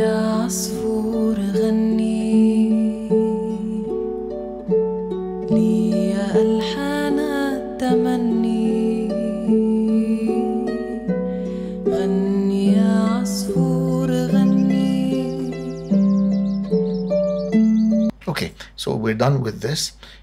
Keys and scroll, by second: 17.9 space.